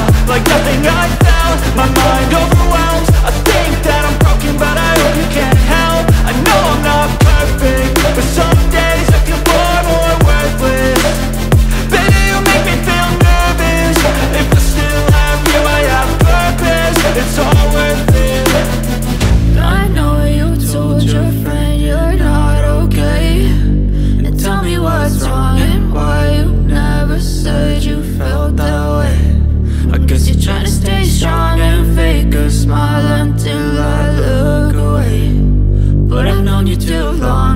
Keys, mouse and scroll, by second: 21.7 ctrl+click, 25.9 ctrl+click, 27.5 ctrl+click, 28.4 ctrl+click.